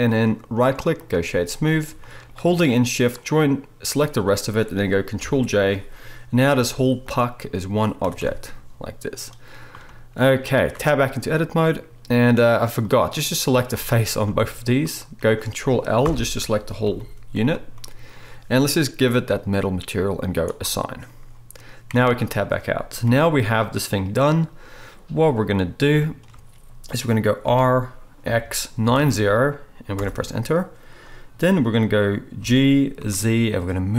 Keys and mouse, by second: 0.5-2.3 right drag, 2.3-7.1 shift+drag, 3.1 shift+middle click, 3.1 shift+right click, 5.3 ctrl+j, 6.6 g, 7.1-9.5 middle drag, 8.0 r, 11.2 Tab, 16.1 ctrl+l, 16.9 g, 19.1 click, 20.5-33.9 drag, 22.1 Tab, 23.1 KP_1, 27.5 r, 32.4 g.